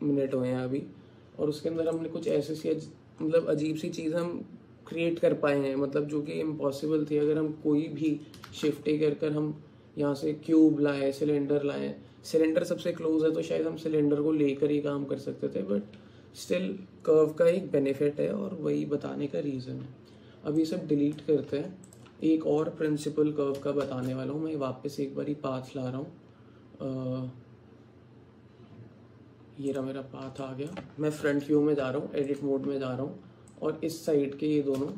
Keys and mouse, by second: 2.0 alt+click, 7.5 middle click, 8.5 shift+a, 20.7 click, 21.5 x, 23.9 shift+a, 30.4 alt+click, 31.3 KP_1, 31.8 Tab, 33.6 click, 34.8 x.